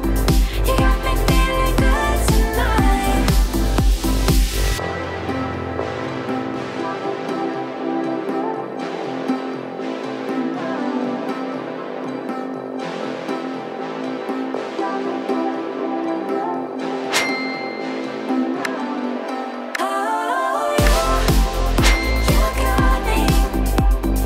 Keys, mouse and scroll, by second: 3.0 m, 3.5 click, 4.2 Delete, 6.5 click, 8.5-9.8 middle drag, 10.5 click, 11.0-11.3 scroll up 1, 11.3-12.3 middle drag, 13.4 click, 16.5-17.1 middle drag, 18.4 click, 19.0-19.5 middle drag, 20.4-23.2 drag, 23.2-23.8 middle drag.